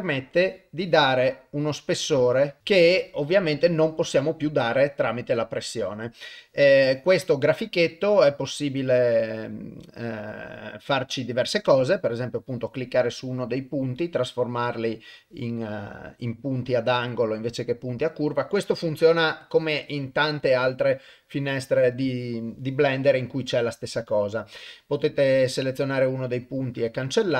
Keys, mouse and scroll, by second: 0.8-2.6 drag, 4.2-5.9 drag, 6.7-21.0 drag, 21.9-27.3 drag.